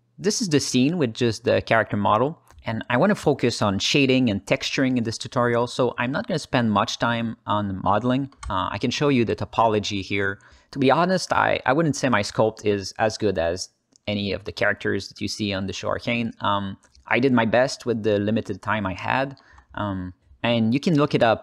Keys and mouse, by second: 0.0 alt+middle click, 2.3-3.2 alt+shift+middle drag, 3.5 ctrl+alt+middle drag, 4.0 alt+middle click, 4.7 alt+shift+z, 5.2-5.8 alt+shift+middle drag, 6.0 ctrl+alt+middle click, 6.6 alt+middle click, 7.7 ctrl+alt+middle click, 8.3-10.6 alt+middle drag, 10.8 ctrl+alt+middle drag, 11.3-12.9 alt+middle drag, 13.1-14.0 ctrl+alt+middle drag, 14.4 shift+middle drag, 14.7 ctrl+alt+middle drag, 15.2 alt+middle drag, 15.5 ctrl+alt+middle click, 16.0-18.2 alt+middle drag, 18.4 alt+shift+middle drag, 18.8 ctrl+alt+middle click, 19.1 alt+middle click, 20.7-21.4 alt+middle drag.